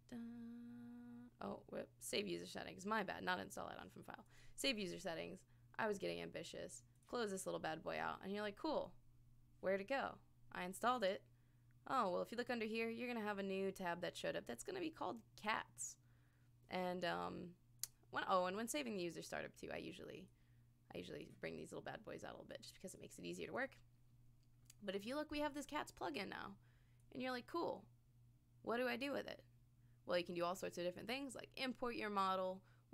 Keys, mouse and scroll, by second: 15.4 click, 17.8 click, 20.3 click, 22.5 click, 22.9 click, 25.6-26.6 scroll up 2, 26.9 scroll up 1, 27.0 click, 30.3 click.